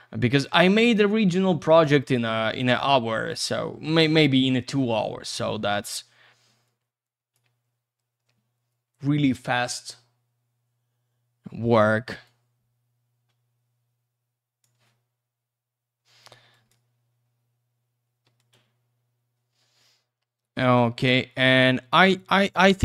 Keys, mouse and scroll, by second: 3.1 click, 5.1 middle click, 6.6 click, 12.2 click, 15.3 F4, 16.5 alt+click, 18.3 ctrl+click, 20.4 middle click, 22.1 click.